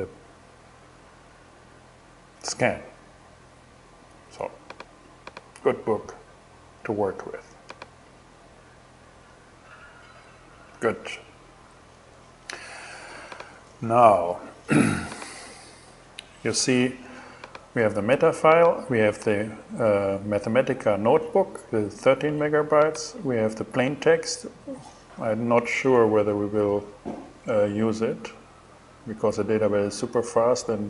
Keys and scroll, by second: 2.3 super+w, 9.8 super+w, 13.8 super+w.